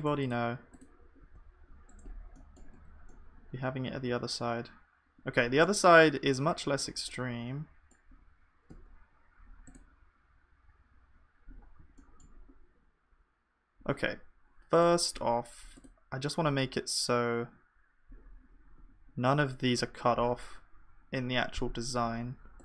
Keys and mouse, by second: 1.2 g, 2.7 Tab, 6.7-22.6 middle drag, 8.7 Tab.